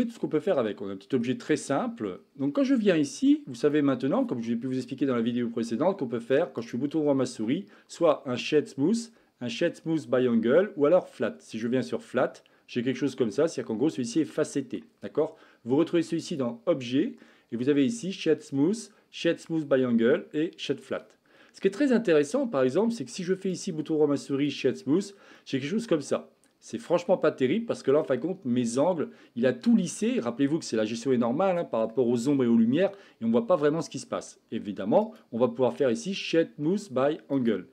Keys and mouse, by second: 0.4-1.3 middle drag, 2.5-3.4 middle drag, 3.7 click, 6.7-11.7 right drag, 12.2-13.0 middle drag, 14.2-14.9 middle drag, 16.2-21.1 drag, 22.2-22.7 middle drag, 23.6-24.5 right drag, 25.4-27.0 middle drag, 35.1-37.5 right drag.